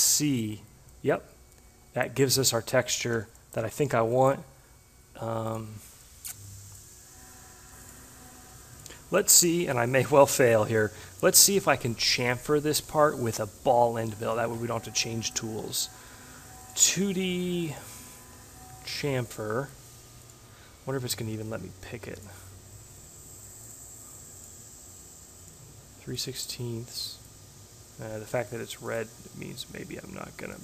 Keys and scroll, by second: 3.2 s.